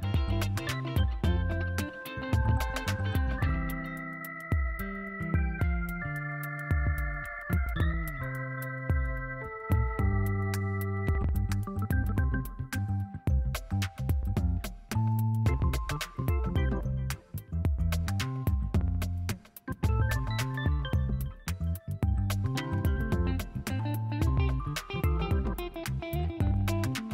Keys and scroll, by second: 1.4 space, 2.6-4.3 typing, 5.4 [, 6.9 8, 7.9 space, 8.3 space, 10.4 [, 13.2 space, 13.6 space, 14.0 ], 15.3 9, 17.6 ctrl+alt+z, 18.7 o, 20.4 space, 22.6 [, 24.1 [, 25.6 8.